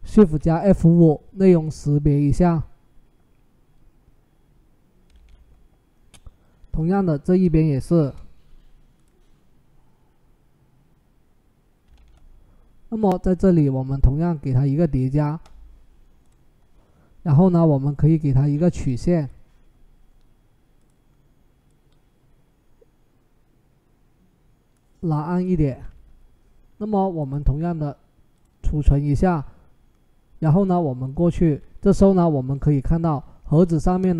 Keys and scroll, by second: 0.0 shift+F5, 4.9 ctrl+d, 7.7 shift+F5, 11.7 ctrl+d.